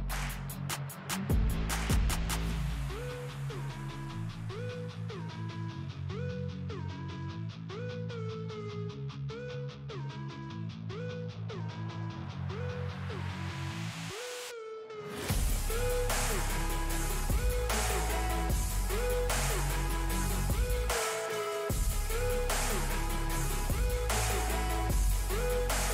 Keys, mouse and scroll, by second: 0.0-2.5 drag, 2.5 scroll up 1, 4.1-6.9 drag, 7.3-8.8 drag, 8.8-12.7 alt+drag, 12.7 shift+right click, 14.8 ctrl+d, 15.7 scroll down 1, 18.3 scroll up 1, 19.2-21.9 drag, 21.9-25.4 alt+drag, 25.4 shift+right click.